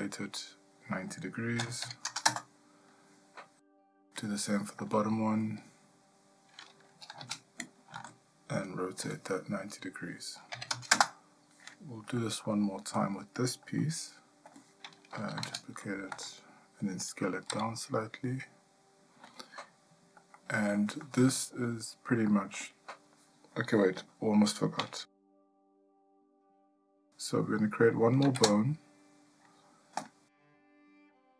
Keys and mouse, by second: 3.9 click, 4.9 shift+middle click, 7.2 shift+d, 9.0 r, 12.2 shift+middle click, 13.8 ctrl+middle click, 15.5 shift+d, 17.5 s, 20.4 ctrl+middle click, 21.0 shift+middle click, 22.3 shift+middle click, 28.4 shift+a.